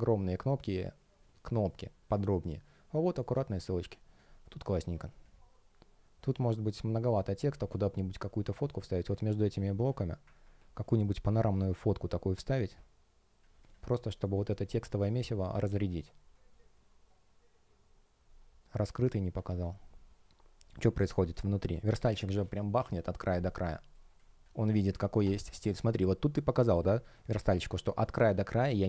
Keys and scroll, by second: 10.9 shift+p, 13.9 shift+0, 14.2 space, 21.2 space.